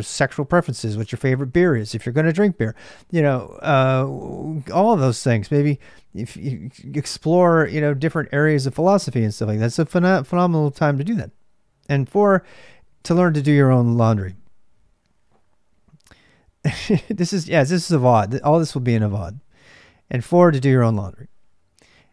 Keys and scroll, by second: 0.0-22.1 typing.